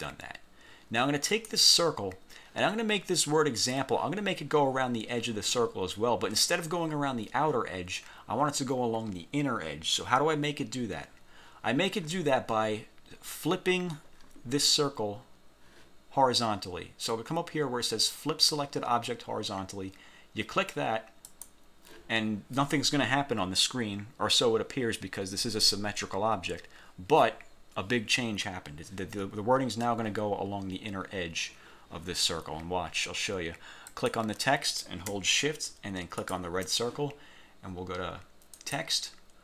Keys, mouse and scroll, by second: 1.4 click, 21.4 click, 34.0 click, 36.3 shift+click, 38.7 click.